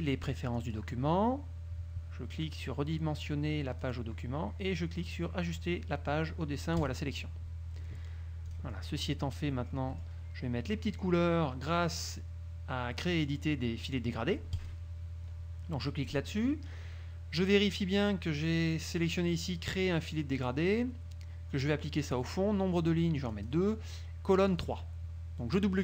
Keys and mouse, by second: 0.7 click, 4.0 click, 6.9 click, 8.6 click, 9.2-10.4 drag, 14.7 click, 23.4 click, 24.6 click.